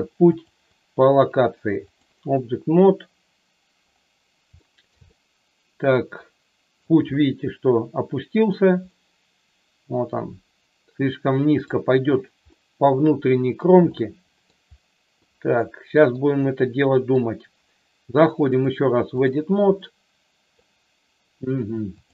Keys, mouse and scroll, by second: 0.4 click, 4.5 shift+middle click, 5.1-6.8 middle drag, 8.9-11.7 middle drag, 15.2 middle click, 16.0 middle click, 17.0 middle click, 18.6 click, 19.7 middle click.